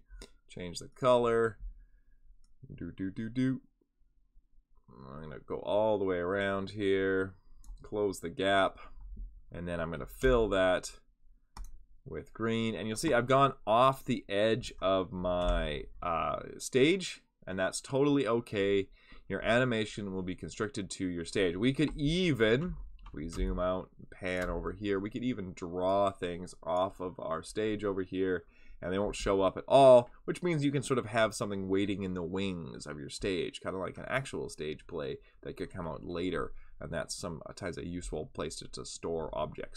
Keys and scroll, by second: 10.2 k, 15.4 v, 23.3 space.